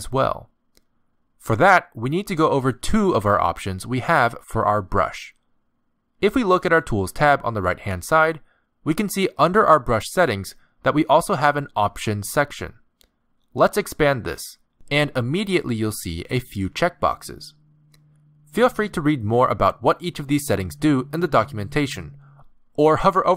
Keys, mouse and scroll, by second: 2.1 z, 13.3 click.